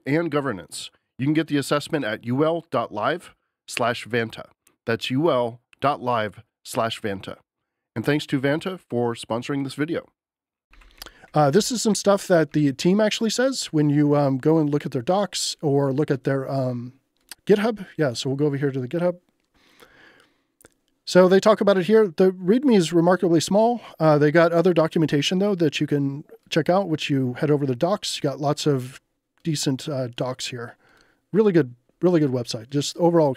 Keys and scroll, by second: 10.4-11.5 typing, 12.5 k.